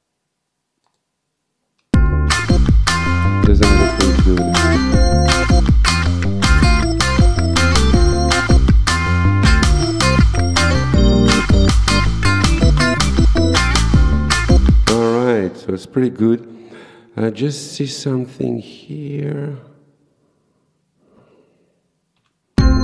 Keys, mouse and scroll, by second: 0.9 click, 2.0 space, 14.9 space, 17.7 click, 22.2 ;, 22.6 space.